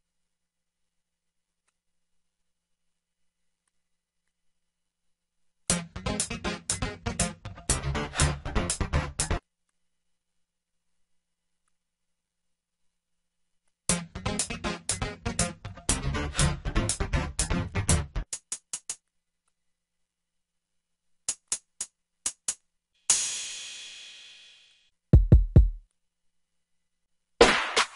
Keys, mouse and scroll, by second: 17.0 click, 19.0 F1, 20.1 F1.